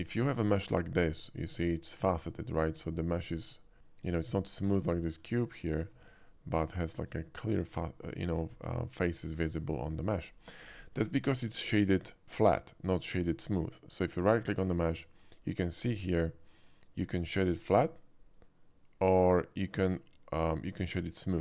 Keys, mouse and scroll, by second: 0.0 shift+middle click, 0.3 shift+middle click, 1.6 shift+click, 2.7 shift+middle click, 3.1 shift+click, 3.3 middle click, 3.8-4.2 middle drag, 4.7 middle click, 4.8 middle click, 4.9 shift+middle click, 5.4 shift+middle click, 6.0 shift+middle click, 6.8 shift+middle click, 8.4 shift+middle click, 8.6 scroll up 1, 9.7-10.1 scroll down 3, 10.2-10.6 shift+middle drag, 11.3 shift+middle click, 14.1 right click.